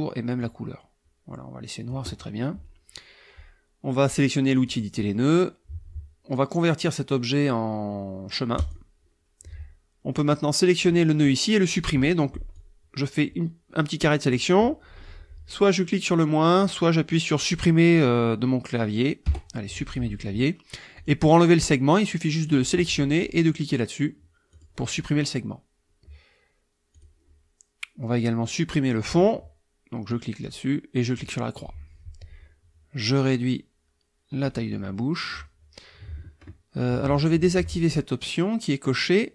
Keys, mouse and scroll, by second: 0.4-2.1 drag, 4.6 click, 8.6 click, 10.3 click, 12.6-14.5 drag, 19.3 Delete, 21.0 click, 22.4 click, 24.5 click, 27.0 click, 30.1 click, 31.1 click, 33.0-34.6 drag, 36.9 ctrl+z.